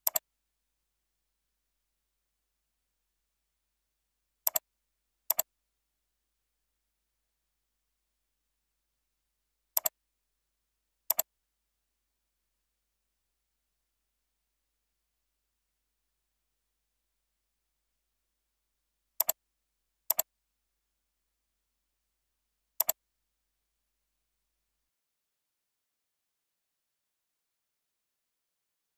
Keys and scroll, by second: 2.1 ctrl+Left.